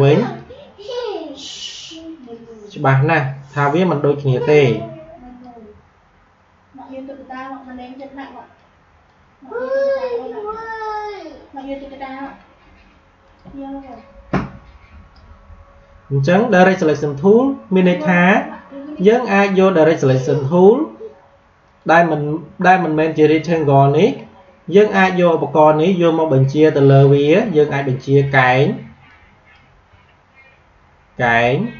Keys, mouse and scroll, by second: 18.9 click, 21.6 click, 26.3-31.7 drag.